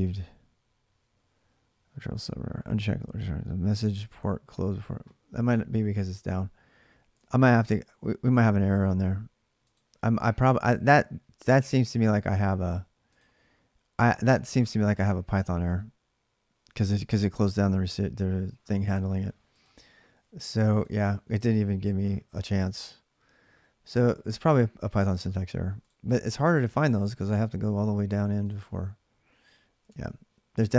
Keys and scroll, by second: 6.9 alt+Tab, 8.1 alt+Tab, 29.6 alt+Tab.